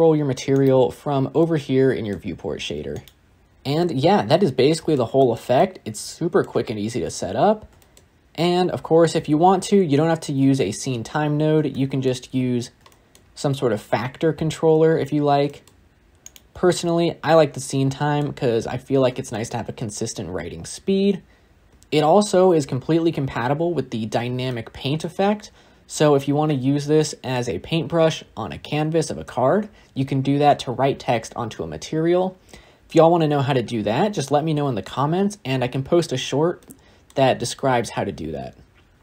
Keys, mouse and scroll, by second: 0.5 click, 1.2-2.8 middle drag, 2.8 click, 3.3-3.7 scroll down 4, 3.7-6.7 middle drag, 6.7 scroll up 3, 6.8-7.6 scroll down 4, 7.6 scroll down 8, 7.7-10.8 shift+middle drag, 11.6 shift+middle click, 12.1 scroll down 1, 12.1-12.8 scroll up 8, 12.8 shift+middle click, 13.1 scroll up 1, 13.2-15.1 scroll down 1, 15.1 scroll down 1, 15.3-16.8 shift+middle drag, 16.8-17.4 drag, 17.4-18.2 middle drag, 18.2 scroll up 1, 18.3 scroll down 4, 18.4 scroll up 2, 19.0 scroll up 1, 19.2 shift+middle click, 19.7-20.1 scroll down 3, 20.1 scroll up 2, 20.4 scroll down 1, 20.5-21.1 scroll up 2, 21.1-21.7 scroll up 6, 21.7-23.3 shift+middle drag, 24.4-25.2 middle drag, 25.2 scroll up 2, 25.5-26.9 scroll down 6, 26.9-27.4 shift+middle drag, 27.4-28.9 scroll up 2, 36.5-38.8 middle drag.